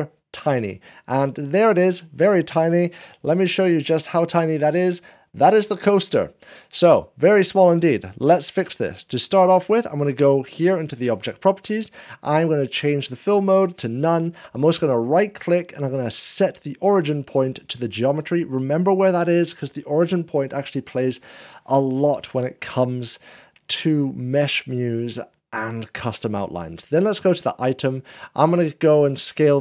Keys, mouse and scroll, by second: 0.7 ., 2.0 middle click, 2.9 ., 3.6 scroll down 1, 4.3 middle click, 4.3 ., 5.9-15.0 drag, 15.0-17.8 right drag, 17.8-29.6 drag, 18.4 middle click.